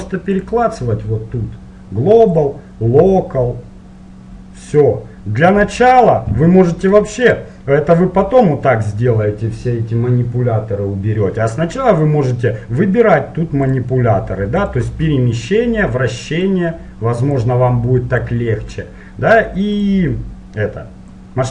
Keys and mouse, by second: 2.4-6.0 drag, 6.0-7.8 middle drag, 7.8-9.3 drag, 13.8-21.5 drag.